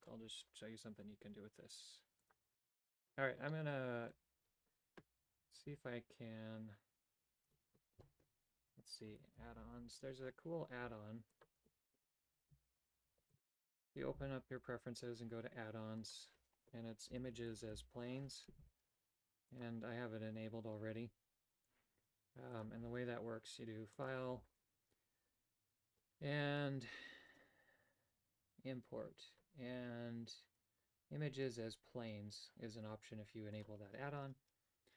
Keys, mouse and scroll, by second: 3.5 middle click, 7.4 space, 9.5 d, 11.2 click, 11.6 space, 23.9-33.6 drag.